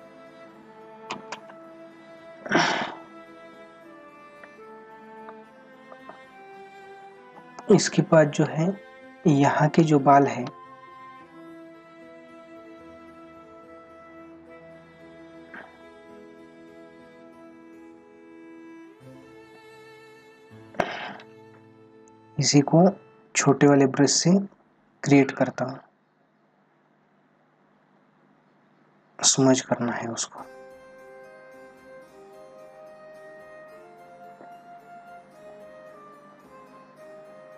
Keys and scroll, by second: 3.6 ctrl+=, 7.6 space, 8.9 ctrl+-, 9.8 space, 11.3 ], 16.1 ].